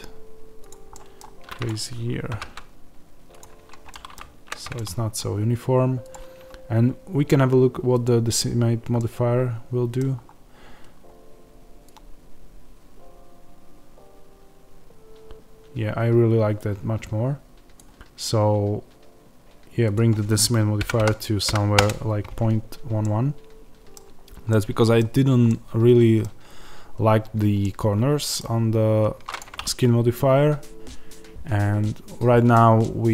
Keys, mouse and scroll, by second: 0.6 click, 0.8 middle click, 1.5 click, 2.2 g, 3.3 click, 3.5 Tab, 3.8-8.0 middle drag, 4.1 z, 8.0 click, 8.9-11.8 middle drag, 10.1-11.2 scroll up 2, 11.2-11.8 scroll up 1, 11.8-22.9 drag, 21.8 KP_Enter, 22.6 scroll down 1, 22.9-29.3 middle drag, 24.9-25.4 scroll down 1, 28.3-28.7 scroll down 1, 29.3 click, 29.5-33.1 middle drag.